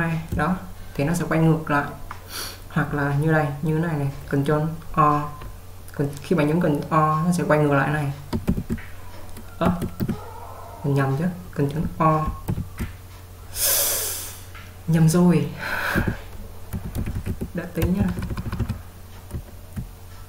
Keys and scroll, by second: 8.7 shift+o, 9.8 Escape, 12.6 o, 16.1-18.4 typing, 19.4-20.0 j.